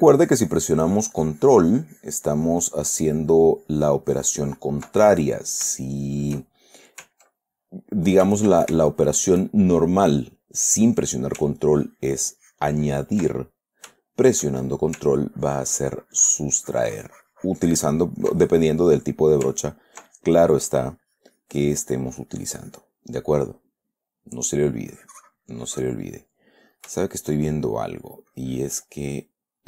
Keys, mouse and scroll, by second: 5.4 ctrl+middle click, 5.7 click, 6.1-7.3 shift+drag, 8.0 ctrl+click, 9.1 ctrl+shift+click, 12.1-13.7 ctrl+drag, 13.7 ctrl+middle click, 14.4 shift+middle click, 15.6-19.3 ctrl+shift+drag, 19.9-23.3 ctrl+drag, 24.0 middle click, 24.6 middle click, 25.3-26.5 drag, 26.5 middle click, 27.3-28.4 shift+middle drag, 28.7-29.6 drag, 29.5-29.6 middle drag.